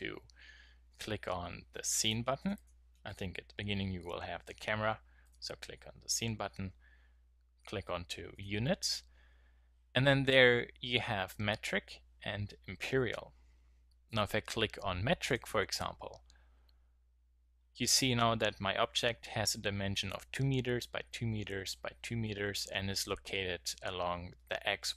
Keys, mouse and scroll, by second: 2.0-4.8 drag, 4.8-5.2 middle drag, 7.0 middle click.